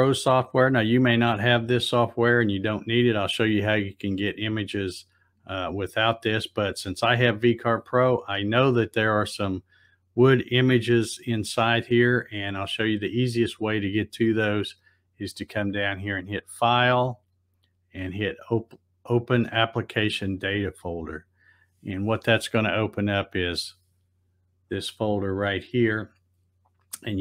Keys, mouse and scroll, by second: 15.8 click, 20.8 click, 23.3-24.7 drag, 25.5 click.